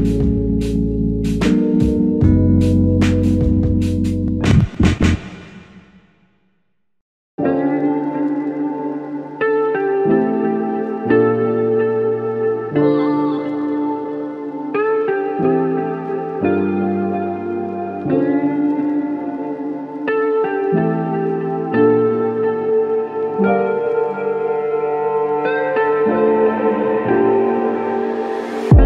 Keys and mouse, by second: 1.9 double click, 2.3 shift+click, 3.5 alt+click, 4.2 alt+click, 4.2 alt+shift+click, 4.9 alt+shift+click, 7.1 typing, 11.7 typing, 14.2 double click, 17.5 alt+click, 18.8 ctrl+z, 19.3 ctrl+z, 20.2 double click, 23.4 alt+click, 26.2 alt+click.